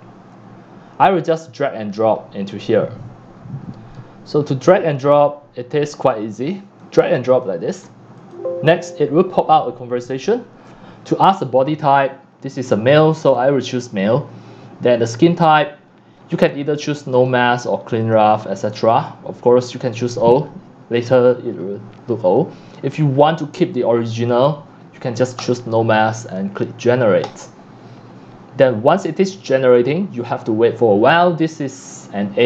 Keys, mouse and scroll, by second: 0.4 scroll, 0.6-1.1 scroll down 1, 1.1-1.6 scroll, 1.8-4.2 scroll down 3, 3.7 right click, 4.2 middle click, 4.2 scroll, 5.0 scroll, 5.7-7.4 middle drag, 7.4 click, 8.4-10.8 drag, 11.6 click, 13.2 click, 17.7 click, 21.9 drag, 24.7 scroll down 1, 25.4 scroll down 1, 25.5-26.5 drag, 28.9 click.